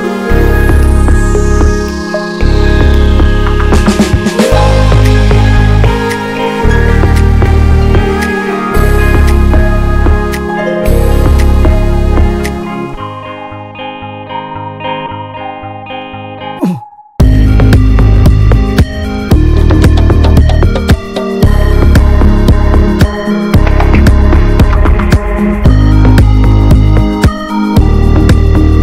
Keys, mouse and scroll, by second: 1.5-3.1 middle drag, 3.1-3.6 scroll up 2, 3.6 scroll down 2, 3.8 middle click, 4.1 scroll up 1, 4.2 click, 4.4-4.8 middle drag, 4.8 scroll up 1, 4.9 drag, 5.1 scroll down 1, 5.4-8.6 middle drag, 8.7-9.9 drag, 10.6-11.7 middle drag, 11.7 shift+d, 13.4-15.4 drag, 16.6 click, 17.1-19.1 middle drag, 19.1 click, 19.6 click, 19.9-21.5 middle drag, 21.5 scroll up 1, 21.6 drag, 21.9-23.2 middle drag, 23.2-24.2 scroll down 1, 24.2 click, 24.9-26.3 middle drag, 26.3 ctrl+s, 26.5 scroll down 1, 26.8 middle click, 26.9 scroll up 1, 27.1 click, 27.4-28.8 middle drag.